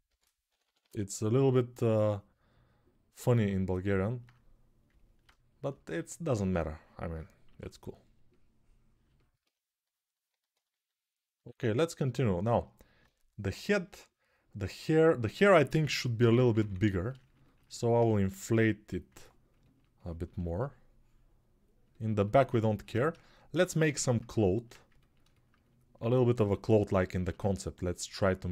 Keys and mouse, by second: 0.2 ], 0.4 ], 0.5 ], 7.2 6, 15.6-16.4 typing, 21.6 ctrl+alt+right click, 21.9 alt+shift+click, 22.0 alt+shift+right click, 22.2 alt+click, 22.6-28.5 ctrl+alt+shift+right drag, 24.3 alt+q.